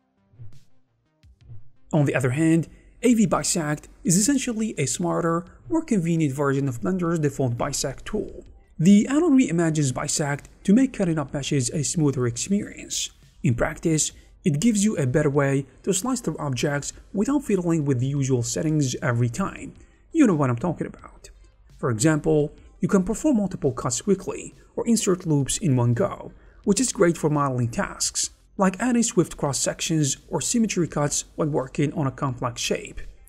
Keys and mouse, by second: 0.1 Tab, 0.1 3, 0.6 shift+click, 1.1 shift+b, 2.1 click, 2.6 alt+a, 2.6 shift+z, 2.6 c, 3.1 click, 3.4 click, 3.7 shift+z, 3.9 shift+KP_5, 4.0 shift+b, 4.7 alt+a, 5.0 middle click, 5.5 shift+3, 5.7 shift+b, 6.4 Tab, 6.8 shift+b, 8.0-9.6 typing, 9.1 click, 9.3 click, 9.8 click, 10.7 c, 11.2 click, 12.2 shift+b, 16.2-17.3 drag, 17.7-22.1 typing, 18.2 click, 19.3 click, 20.1 click, 20.8 click, 22.1 click, 22.4 alt+a, 22.5 click, 24.2 click, 25.0 shift+b, 26.4 click, 26.4 3, 26.6 shift+b, 27.4 3, 27.7 F13, 27.8 click, 28.3 shift+click, 29.1 click, 29.4 shift+b, 30.2 alt+a, 30.2 click, 30.5 3, 30.7 shift+b, 31.5 3, 31.8 shift+click, 32.2 shift+b, 32.5 alt+a, 32.6 click.